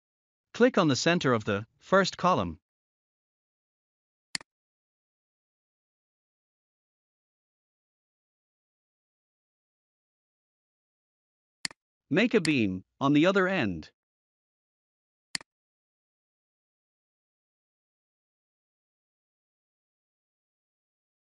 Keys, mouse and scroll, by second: 0.2-0.9 scroll up 1, 2.8 scroll up 1, 4.2 click, 5.3 scroll down 1, 8.4 scroll up 1, 11.5 click, 13.1 scroll up 1, 15.2 click, 16.7 scroll down 1, 19.9 scroll up 1.